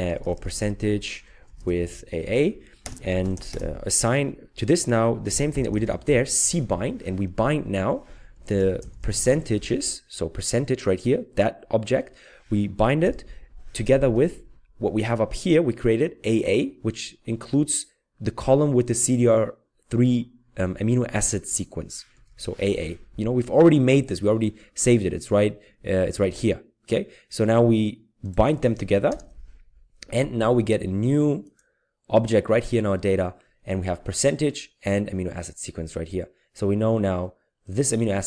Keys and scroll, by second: 0.1-4.0 typing, 5.0-6.7 typing, 8.0-9.8 typing, 13.0 typing, 22.2 typing, 29.1 ctrl+Return.